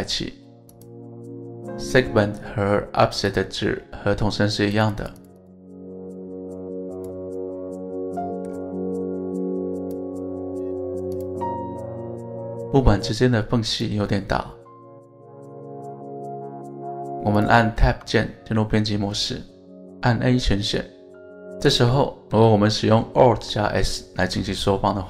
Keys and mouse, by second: 0.8 Tab, 0.8-1.4 drag, 3.3 click, 4.7 click, 5.5 click, 5.8 click, 6.2 click, 8.2 middle click, 9.0 right click, 9.8 click, 10.3-10.9 middle drag, 11.1 click, 11.4-13.2 middle drag, 14.8-15.8 middle drag, 16.5-16.9 middle drag, 17.9 Tab, 18.5 a, 22.1 alt+s, 24.0 right click.